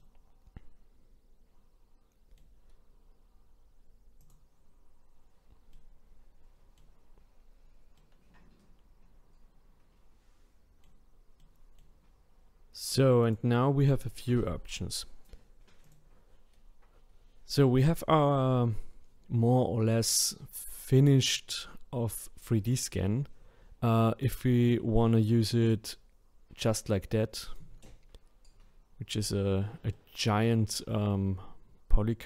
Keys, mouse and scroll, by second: 0.0-4.2 middle drag, 4.2 click, 5.7-11.0 middle drag, 11.4-13.2 middle drag, 13.2-20.4 drag, 23.9-27.4 middle drag, 29.1 click, 29.9-32.2 middle drag.